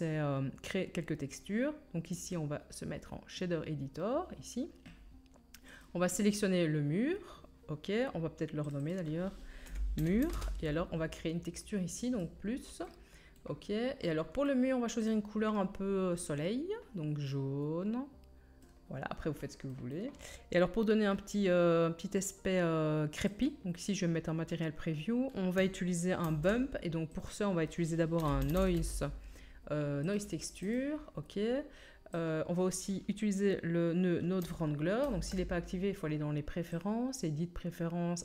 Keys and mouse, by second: 3.4-5.8 middle drag, 5.8-8.6 drag, 8.6 middle click, 8.7 click, 8.8-15.0 middle drag, 15.0-23.3 drag, 23.3 middle click, 23.4-32.1 drag, 26.2 shift+a, 32.1-36.7 middle drag, 35.0 ctrl+t.